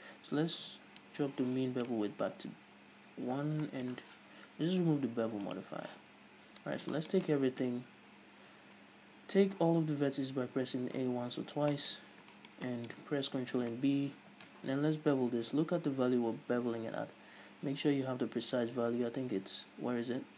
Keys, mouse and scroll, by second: 1.1-3.8 drag, 2.6-3.5 scroll down 2, 3.5 n, 3.8-5.6 middle drag, 5.6 click, 6.2 Tab, 6.8 scroll up 2, 7.1-13.8 shift+middle drag, 8.6 a, 11.6 scroll down 2, 12.1-12.4 scroll up 2, 13.4-14.5 scroll up 2, 14.5 ctrl+b, 14.5-18.6 middle drag.